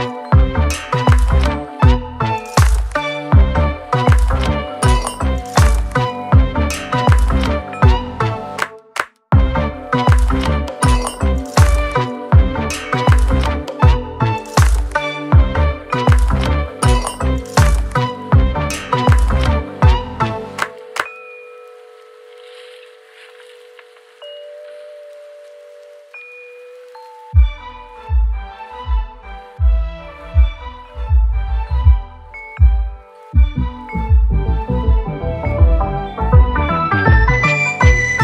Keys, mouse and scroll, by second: 2.5 click, 5.0 ctrl+click, 6.5 ctrl+click, 8.0 ctrl+shift+click, 9.0 ctrl+right click, 10.1 ctrl+right click, 10.5 ctrl+click, 10.9 click, 12.2 shift+click, 13.9 shift+click, 15.2 alt+click, 17.7 click, 19.1 click, 21.3 click, 22.3 click, 26.9 space, 27.7 click, 28.4 click, 32.5 click, 33.7 click, 35.1 click, 35.7-36.2 scroll up 2.